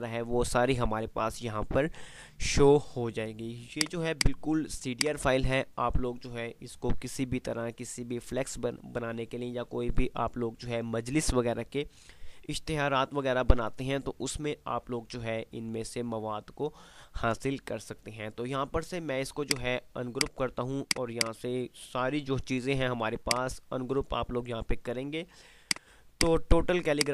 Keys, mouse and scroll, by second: 3.8 click, 19.5 click, 22.9 F2, 23.3 click, 23.6 F2, 24.2 F2, 25.8-27.1 drag.